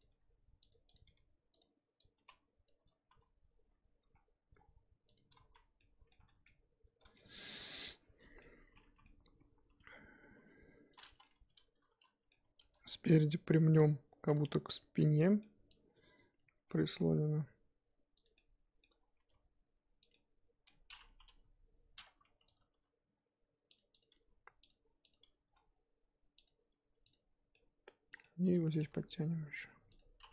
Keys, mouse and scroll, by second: 0.0 click, 0.1 g, 0.9 click, 1.0 g, 2.6 click, 3.1 s, 5.5 z, 5.8-6.2 middle drag, 6.2 Tab, 6.4-8.0 middle drag, 8.0 Tab, 8.5-9.7 middle drag, 9.7 KP_3, 10.3 KP_1, 11.0 click, 11.2-12.5 middle drag, 12.5 g, 14.3 click, 14.4-16.4 middle drag, 16.4 click, 16.7 g, 18.3 middle click, 19.2 g, 20.1-21.3 middle drag, 21.3 KP_3, 22.0 click, 22.6 click, 22.7 g, 24.0 click, 24.1 g, 25.1 click, 25.2 g, 27.1 click, 27.5 middle click, 28.1 click, 28.2-28.7 middle drag, 28.7 g.